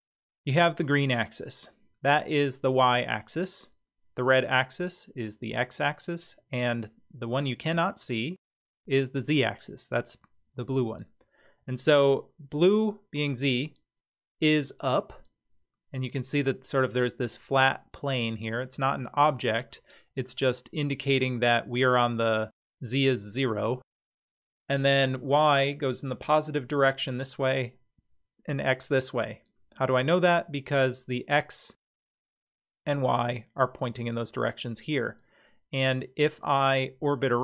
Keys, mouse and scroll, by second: 14.6-16.4 middle drag, 19.7-20.3 middle drag, 32.0 middle click, 36.8-37.4 middle drag.